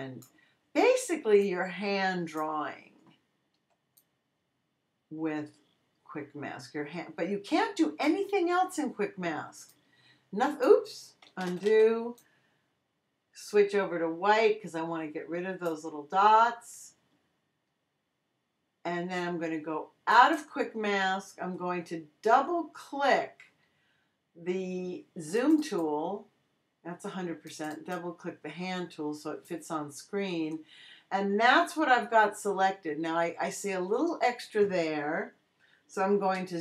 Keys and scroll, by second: 3.5 x, 11.4 super+z, 11.6 super+x, 12.5 x.